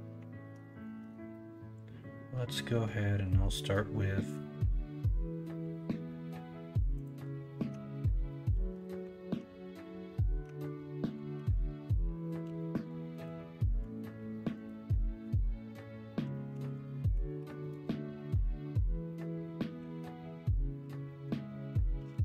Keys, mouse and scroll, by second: 1.0 shift+a, 10.4 Tab, 11.3 g, 13.8 ,, 16.5 r, 19.7 s, 21.9 g.